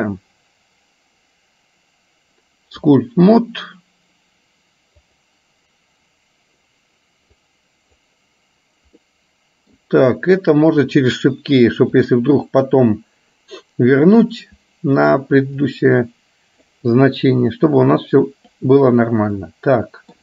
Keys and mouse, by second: 5.3 click, 7.6 click, 9.1 middle click, 14.2 click, 15.7-16.8 drag, 17.7 click, 19.5 middle click.